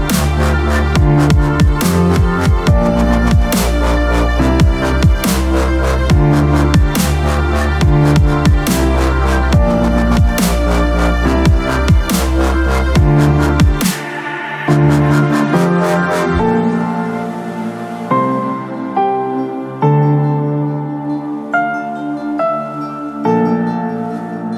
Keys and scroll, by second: 4.2 ctrl+KP_0, 4.4 KP_Add, 4.8 KP_Add, 5.4 ctrl+b, 10.2 space, 14.3 space, 19.9 space.